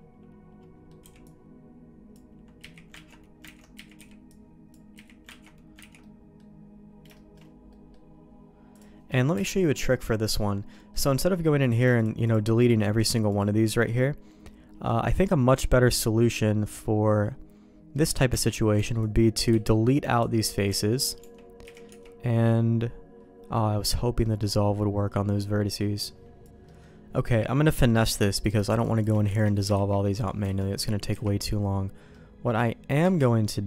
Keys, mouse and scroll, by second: 1.0 b, 2.5 z, 2.9 ctrl+q, 3.4 ctrl+x, 3.7 z, 3.9 b, 4.9 z, 5.4 ctrl+q, 5.8 ctrl+x, 6.0 middle click, 7.1 shift+middle click, 7.6 middle click, 8.7 click, 9.3 KP_Decimal, 10.7 middle click, 11.6 click, 11.9 shift+click, 12.2-13.5 shift+drag, 13.8 middle click, 15.0 middle click, 15.6 middle click, 17.9 middle click, 18.2 Tab, 18.9 alt+click, 19.4 x, 20.6 Tab, 21.2 Tab, 21.6 a, 21.8 3, 23.4 middle click, 24.2 middle click, 26.5 Escape, 26.6 middle click, 27.6 middle click, 28.1 alt+a, 28.4 click, 28.7 shift+click, 29.4 ctrl+x, 29.7 ctrl+z, 30.5 alt+a, 30.5 middle click, 31.1 KP_1, 32.1 middle click, 33.0 KP_1.